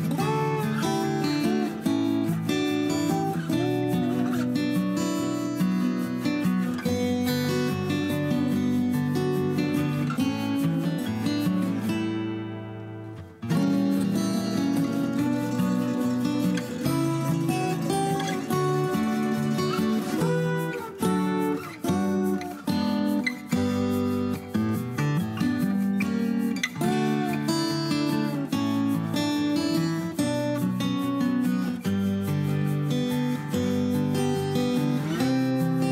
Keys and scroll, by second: 2.4-3.1 typing, 7.3 Escape, 7.9 Escape, 10.7 ctrl+a, 11.4 ctrl+h, 15.2 m, 17.5-19.1 typing, 19.9 ctrl+z, 22.9 Escape, 26.6 p, 28.2 Escape, 29.7 h, 33.8 p, 34.6 Escape.